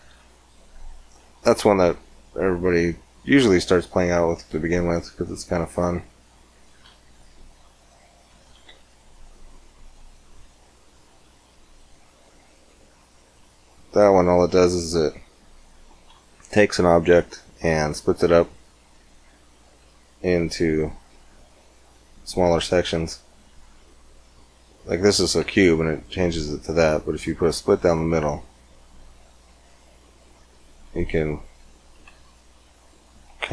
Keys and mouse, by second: 1.5 shift+a, 6.6 shift+s, 8.5 shift+a, 11.5-13.5 drag, 14.4-15.5 middle drag, 17.5 Tab, 20.3-23.1 drag, 25.5 ctrl+r, 32.0 ctrl+r.